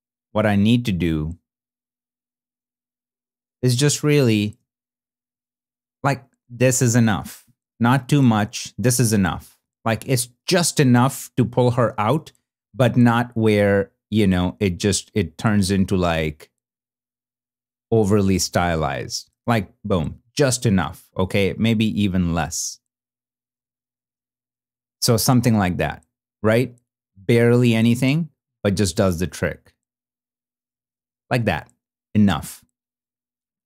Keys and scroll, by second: 3.6 super+d, 4.5 shift+super+d, 5.0 shift+super+f, 5.6 shift+super+f, 5.7 shift+super+d, 9.5 shift+super+d, 9.6 shift+super+f, 10.4 shift+f, 11.3 super+d, 18.0 super+d.